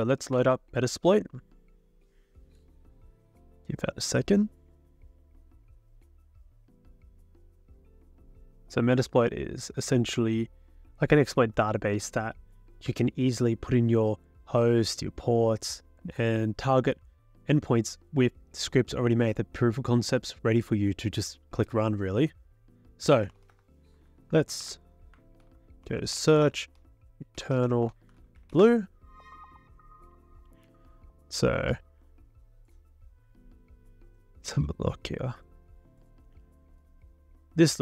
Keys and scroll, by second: 0.0-0.4 typing, 0.4 Return, 23.0-24.3 typing, 24.6 ctrl+c, 25.4 ctrl+l, 25.6-29.1 typing.